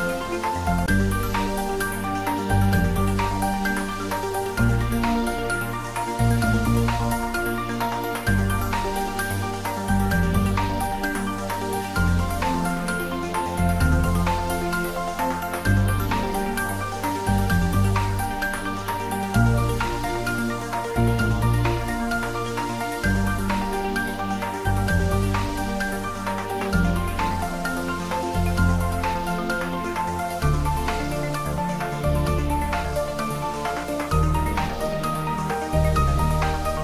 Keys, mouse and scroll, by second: 1.5 click, 2.4 r, 10.1 click, 10.6 g, 15.1 click, 20.3 r, 25.3 click, 26.0 g, 34.6 click, 35.1 scroll down 1, 36.0-36.8 middle drag.